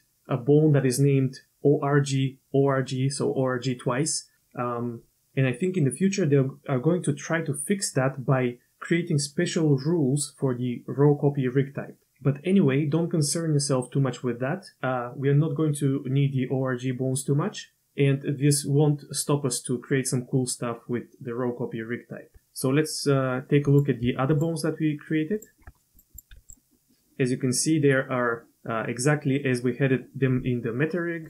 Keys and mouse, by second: 23.7 click, 24.3 shift+click, 25.3 shift+click, 25.9 click, 26.1 click, 26.3 r.